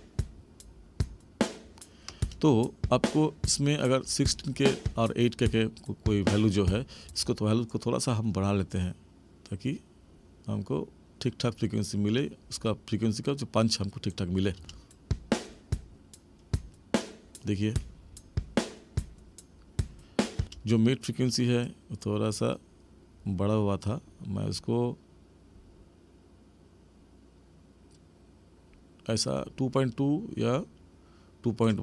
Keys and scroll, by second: 7.0 space, 14.6 space, 20.3 space.